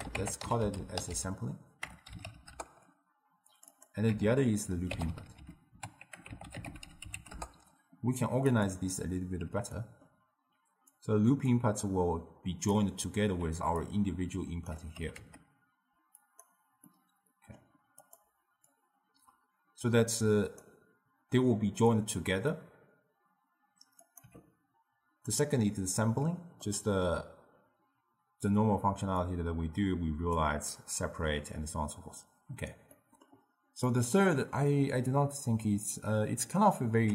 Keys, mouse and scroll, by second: 3.6 click, 3.7-5.2 drag, 5.2 o, 8.5-9.5 drag, 9.5 n, 9.8-11.0 middle drag, 11.0-15.0 drag, 15.0 g, 17.0-18.1 middle drag, 18.1 click, 18.8 click, 24.1 click, 24.3 n, 26.7-29.3 middle drag, 29.3 click, 33.0 middle click, 34.0 click.